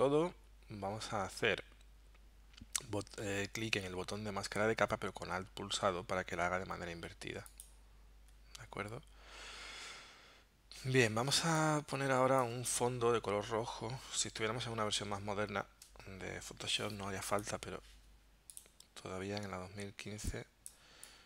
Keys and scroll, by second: 11.2 space.